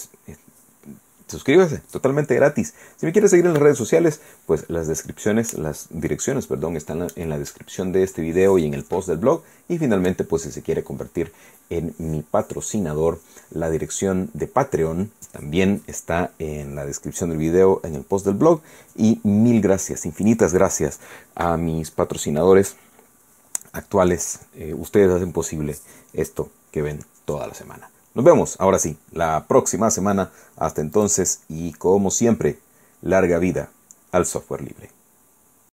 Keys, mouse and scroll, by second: 31.0 click, 35.7 click.